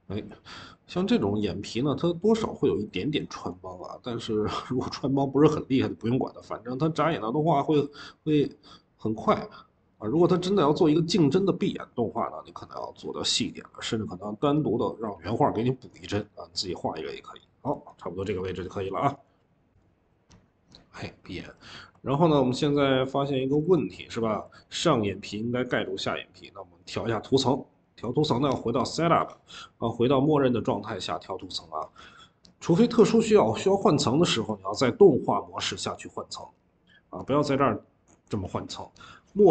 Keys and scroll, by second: 23.0-24.8 typing.